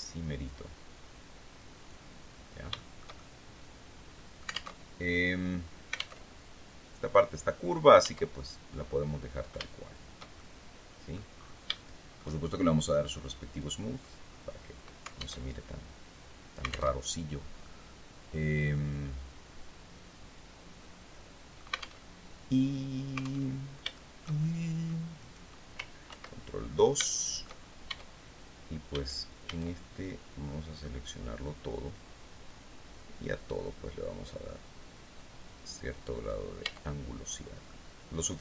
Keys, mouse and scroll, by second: 1.8-2.1 scroll down 2, 2.2-3.9 shift+drag, 3.9 alt+middle click, 4.2 alt+Tab, 5.6 alt+Tab, 7.5 Tab, 8.2 scroll down 2, 9.0-10.8 shift+middle drag, 11.2 shift+middle click, 13.0 click, 13.7 scroll down 2, 14.9 alt+Tab, 16.4 alt+Tab, 17.1-21.2 drag, 21.5 alt+Tab, 22.9 alt+Tab, 23.4-24.5 shift+drag, 24.6 right click, 25.5 ctrl+2, 26.2 ctrl+scroll up 2, 26.5 shift+right click, 27.3 shift+Tab, 28.4 a, 31.9-35.9 drag, 36.1 Tab, 36.6-36.9 scroll down 2, 37.1-38.4 drag.